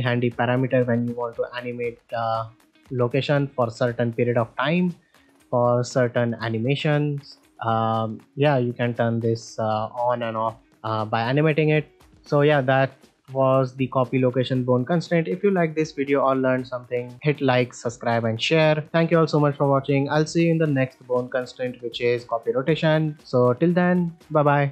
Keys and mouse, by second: 2.9-3.4 middle drag, 6.6-7.1 middle drag, 12.0 ctrl+middle click, 12.3 middle click, 21.4-23.1 drag.